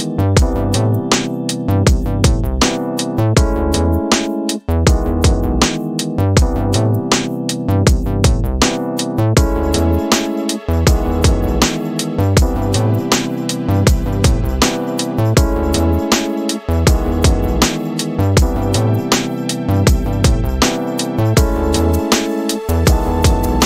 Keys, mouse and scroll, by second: 6.6-14.2 drag, 18.5 click, 20.4 click, 20.6 click.